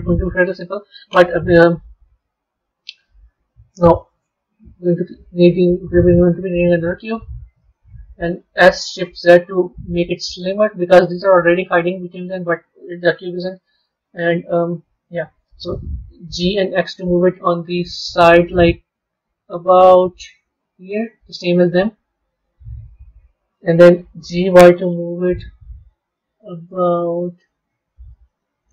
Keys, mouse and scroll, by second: 2.1-4.5 middle drag, 4.5 shift+a, 8.4 s, 13.3 KP_7, 14.2-16.2 scroll down 3, 16.2 g, 21.3-24.1 middle drag, 24.1 g.